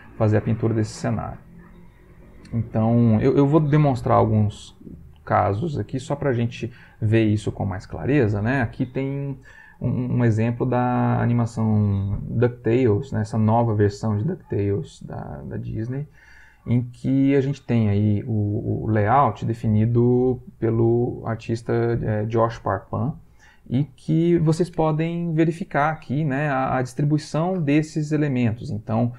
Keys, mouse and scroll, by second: 7.5 click.